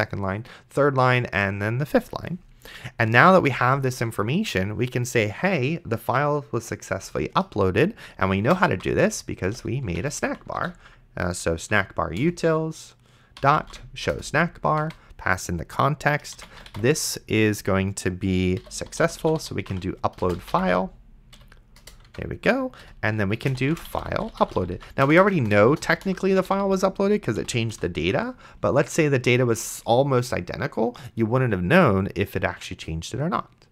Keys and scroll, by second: 3.7 Return, 8.3-11.7 typing, 12.2 Return, 13.1-14.2 typing, 14.8 Tab, 16.3-17.3 typing, 18.4-21.0 typing, 21.4 Down, 21.8 Return, 22.1 Tab, 22.8-27.7 typing, 27.4 End, 29.6 ctrl+s.